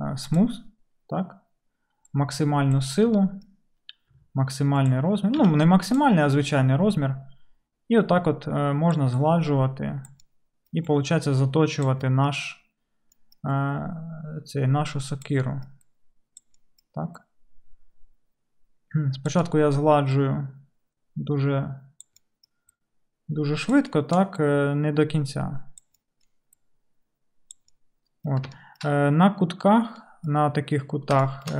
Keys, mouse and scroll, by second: 4.1 f, 5.0 click, 5.0-6.3 right drag, 5.4 f, 6.3-31.5 middle drag.